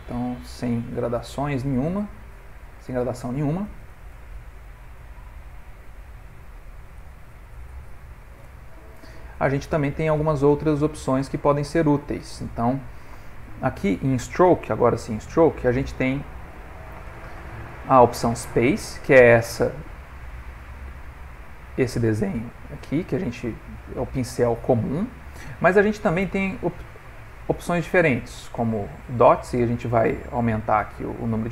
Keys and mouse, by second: 7.2 click, 8.9 middle click, 9.8 ctrl+middle click, 10.6 f, 13.8 middle click, 14.6 click, 14.9 middle click, 16.3 ctrl+middle click, 20.4 click, 21.3 click, 23.2 click, 24.2 click, 25.8 click, 27.5 click, 29.6 click, 30.9 click.